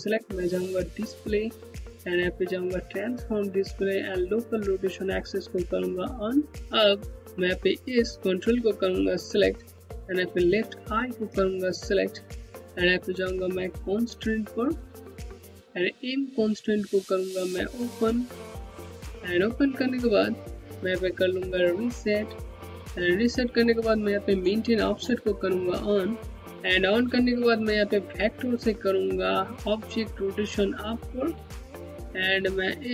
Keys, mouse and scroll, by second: 0.7 click, 5.6 click, 8.0 Home, 10.7 ctrl+click, 14.2 click, 17.6 click, 19.3 Home, 25.0 click, 27.8 click, 30.4 click.